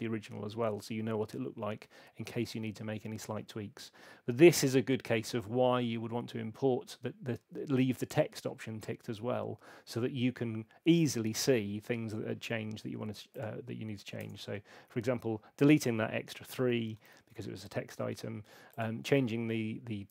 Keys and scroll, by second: 14.2 BackSpace, 17.0 super+8.